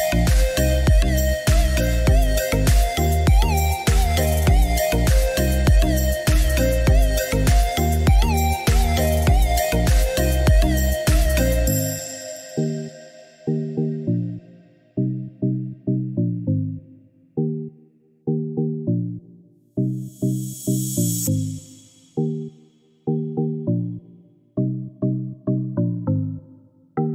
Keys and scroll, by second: 6.8 Escape, 18.1 1, 18.5 4, 19.1 8, 19.3 Return, 23.9-25.4 typing.